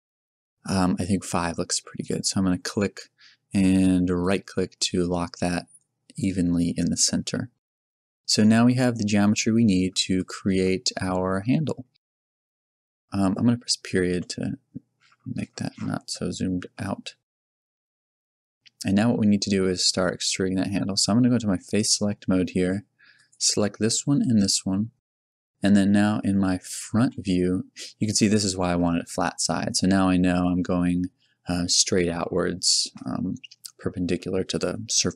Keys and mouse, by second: 5.2-8.0 drag, 8.0 a, 10.1-11.6 right drag, 14.1 KP_Decimal, 14.2 KP_Decimal, 18.2 KP_Decimal, 27.0 KP_1, 30.5 z, 33.5 z.